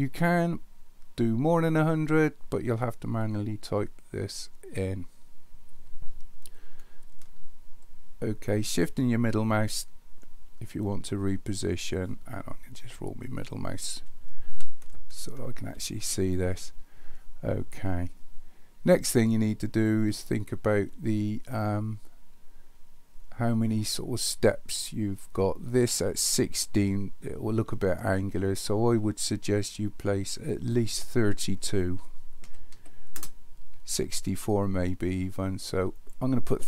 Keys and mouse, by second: 8.0-11.6 shift+middle drag, 15.0-15.7 shift+middle drag, 30.7-33.8 drag, 36.1-36.6 drag.